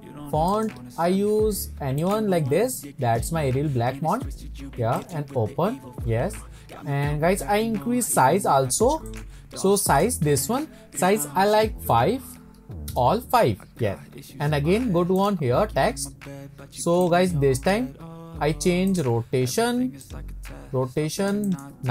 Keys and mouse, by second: 0.6-1.0 drag, 9.2 click, 9.9-13.8 drag, 17.0 click, 18.9 click, 20.1-21.3 drag, 21.7-21.9 drag.